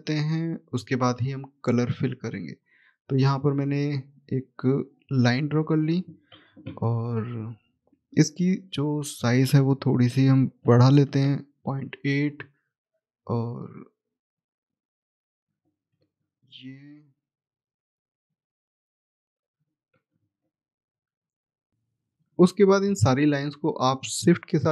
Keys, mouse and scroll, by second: 2.1 click, 6.5 Escape, 7.3-8.7 scroll up 1, 8.8 click, 10.0 ., 10.9 Return, 13.2 click, 15.0 Escape, 15.6 click, 17.4 Escape, 17.4-17.8 scroll down 1, 17.8-18.7 scroll up 1, 18.8 click, 19.6 Escape, 20.1 click, 24.1 shift+click.